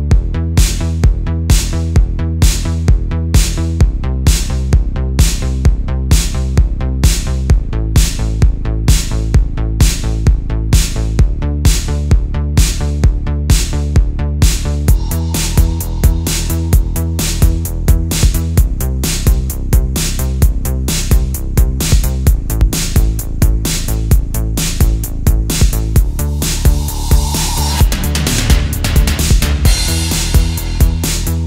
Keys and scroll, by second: 4.3 super+z, 12.6 super+z, 12.8 space, 13.3 space, 13.7 space, 14.4 alt+super+space, 14.7 alt+super+space, 15.9 space, 18.5 super+space, 20.9 super+z, 21.9 space, 22.3 space, 23.1 alt+super+space, 24.2 space, 28.8 space, 29.2 space.